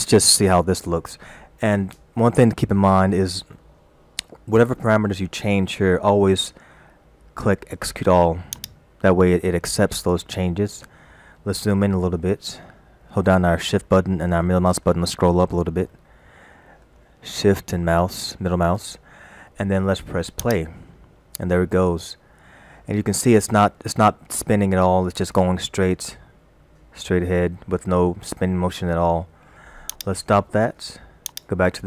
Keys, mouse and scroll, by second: 8.6 click, 11.8 shift+middle click, 13.9 shift+middle click, 15.0 scroll up 2, 15.9 shift+scroll up 1, 16.0 shift+middle click, 17.2 shift+middle click, 20.5 click, 30.0 click, 31.3 click.